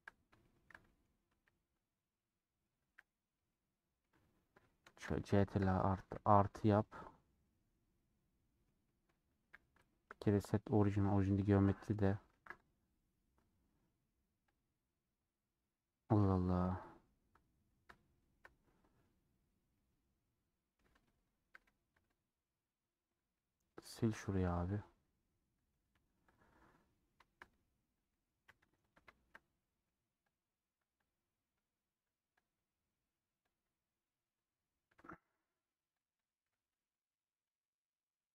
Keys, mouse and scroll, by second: 1.7 c, 2.3 middle click, 2.8 c, 3.5-5.2 middle drag, 5.2 ctrl+KP_Add, 5.7 ctrl+KP_Add, 6.3-7.4 middle drag, 7.4-8.0 scroll up 3, 8.0-9.0 middle drag, 9.0-9.9 scroll down 4, 9.9 Tab, 9.9-11.6 right drag, 11.6 middle click, 11.9-12.7 scroll down 1, 12.7 ctrl+a, 13.5 Tab, 13.7-15.0 right drag, 15.0-16.7 middle drag, 16.7 KP_7, 19.7-21.0 middle drag, 21.0 Tab, 22.9 scroll up 2, 23.3 middle click, 23.8 scroll down 1, 24.0 scroll up 1, 24.4 2, 24.6 alt+click, 25.6-26.0 scroll up 2, 26.0 1, 26.2 click, 26.6-27.6 scroll up 2, 27.6 click, 28.1 click, 29.1-30.4 shift+middle drag, 30.4 click, 31.2 click, 35.0-36.1 shift+middle drag, 36.1 shift+click, 36.5 j, 37.6 click.